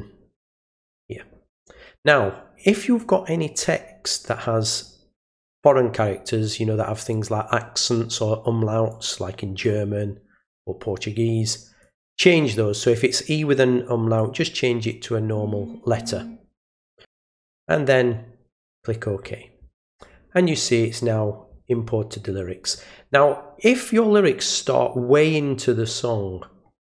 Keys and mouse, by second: 3.0 click, 4.7 click, 5.3 click, 7.1 click, 8.9 click, 11.8 click, 12.5 click, 14.2 click, 18.7 click.